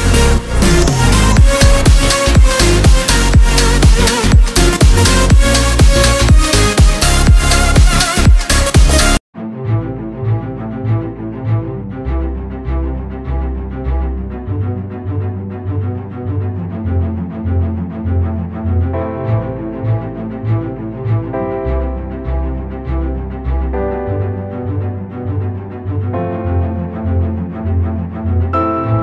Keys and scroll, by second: 3.1 ctrl+s, 6.1 ctrl+s, 8.0 ctrl+s.